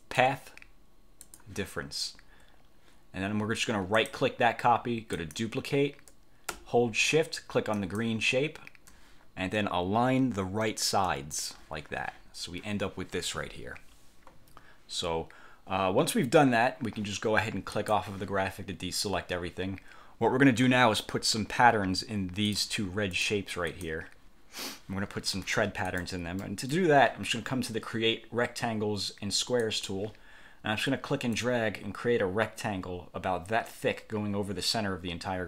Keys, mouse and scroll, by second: 0.2 click, 1.4 click, 4.1 click, 5.3 click, 7.9 shift+click, 11.2 click, 17.9 click, 22.6 click, 23.2 click, 23.8 click, 26.0 click, 26.6 click, 29.8 click, 31.4-35.4 drag.